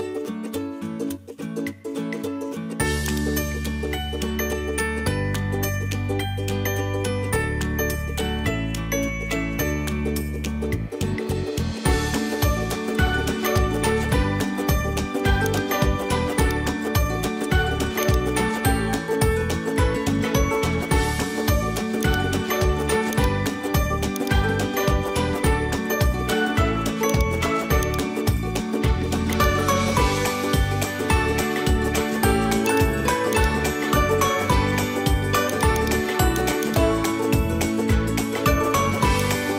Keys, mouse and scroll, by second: 0.6 s, 3.5-5.8 middle drag, 7.0 g, 8.3-9.5 middle drag, 10.1 middle click, 16.4 click, 20.3 ctrl+Tab, 22.0 click, 23.2-24.2 drag, 24.6 ctrl+Tab, 25.9 ctrl+Tab, 27.1 click, 27.8 click, 28.6 middle click, 29.4 click, 33.4 click, 33.7 Tab, 34.3 Tab, 35.5 click, 36.6 click, 37.0 g, 38.7 h, 39.2 click.